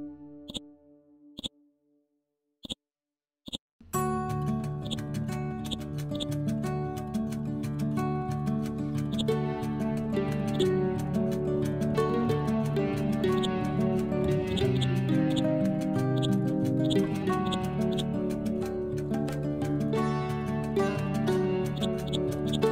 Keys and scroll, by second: 8.4 Up, 8.7 Left, 10.4 ctrl+z, 10.9 Down.